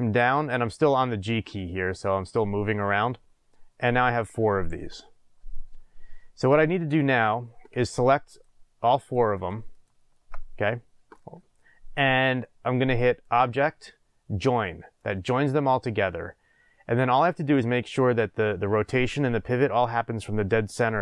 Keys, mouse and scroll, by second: 2.1 drag, 4.9-8.3 middle drag, 5.8-6.1 scroll, 8.3 click, 9.0 shift+click, 9.3 shift+click, 9.7 shift+click, 13.2-21.0 drag.